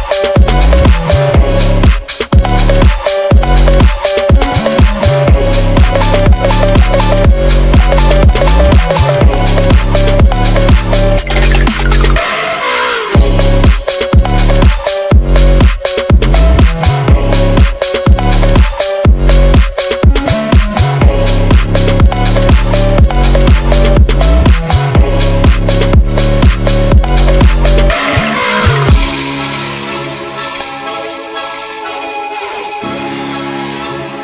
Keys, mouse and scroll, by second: 2.5 Tab, 2.6 click, 2.9-3.3 scroll down 7, 3.3 click, 4.9 click, 5.9 click, 7.2 click, 7.8 click, 7.9 ctrl+z, 8.1 ctrl+z, 8.1 ctrl+z, 8.8-9.5 scroll down 13, 9.5 click, 9.6-10.0 scroll down 15, 10.0-10.3 scroll up 15, 10.3-10.7 scroll down 14, 10.7 click, 12.3 click, 12.3 right click, 13.3 click, 14.0 click, 14.3 click, 15.0-15.4 drag, 15.4 Tab, 15.6 a, 16.0 click, 16.5 e, 17.0 Tab, 17.2 click, 17.5 scroll up 1, 17.7 click, 17.9 Tab, 18.9 click, 19.4 click, 19.4 scroll up 2, 20.0 click, 22.4 Tab, 23.5 click, 24.1-24.7 drag, 24.9 scroll down 2, 25.1 click, 26.4 g, 26.9 click, 27.7 click, 28.3-29.1 scroll down 3, 28.5 click, 29.1 click, 30.6 click, 30.8 g, 32.5 click, 33.3 click.